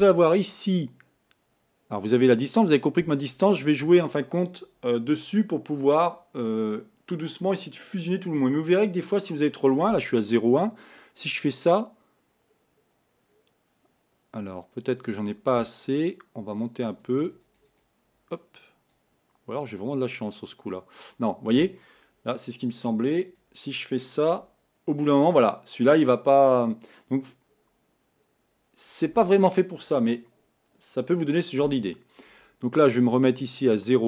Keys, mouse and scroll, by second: 10.8-13.7 drag, 17.2 click, 17.5 click, 18.9-22.0 drag, 23.5 click, 24.6 r, 32.3 click, 33.7-34.0 drag.